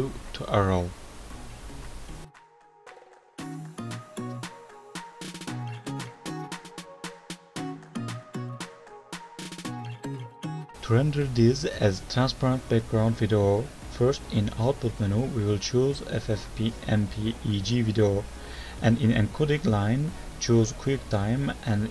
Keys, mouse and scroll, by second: 1.2-1.8 scroll up 1, 1.8 alt+right click, 5.6 ctrl+End, 7.1 click, 8.0 space, 10.2 Page_Up, 10.9 click, 11.1 click, 12.1 click, 12.1-12.7 scroll down 2, 12.7-13.4 scroll down 2, 15.6 click, 17.6-18.7 scroll down 4, 18.7 click, 18.7 scroll down 2, 19.0 click, 19.3 click, 20.6 scroll down 1, 20.6 click.